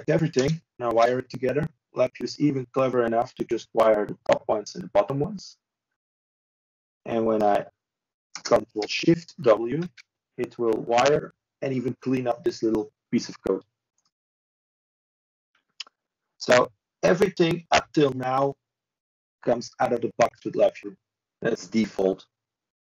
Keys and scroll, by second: 1.6 ctrl+c, 5.7 ctrl+space, 6.9 ctrl+i, 10.1 ctrl+z, 13.2 ctrl+space, 14.5 ctrl+shift+i.